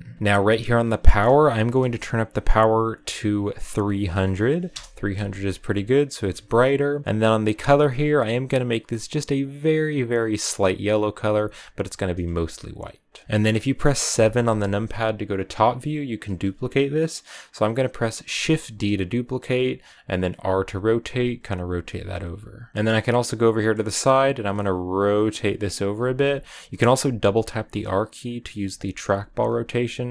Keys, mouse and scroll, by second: 0.0 r, 0.1 g, 4.6 0, 10.1 click, 13.3 click, 18.2 shift+d, 20.2 r, 21.5 g, 22.7-24.2 middle drag, 24.2 r, 25.9 r, 26.9 r, 29.1 r.